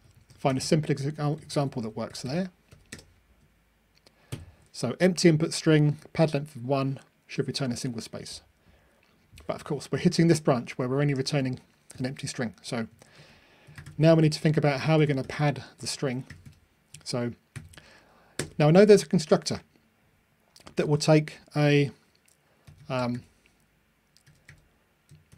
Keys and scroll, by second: 0.5 Delete, 4.3 super+F9, 5.9 ctrl+r.